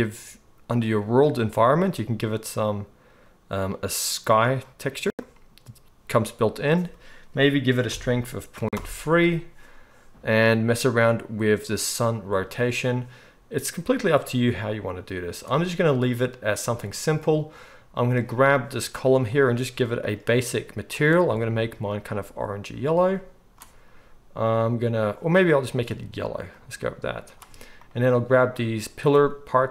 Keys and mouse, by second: 1.5-18.0 middle drag, 18.0-19.3 right drag, 19.3 middle drag, 19.4-19.9 right drag, 19.9-21.0 middle drag, 20.4 click, 20.4-29.7 right drag, 27.7 click, 27.7 middle click, 29.1-29.7 drag, 29.1-29.7 middle drag.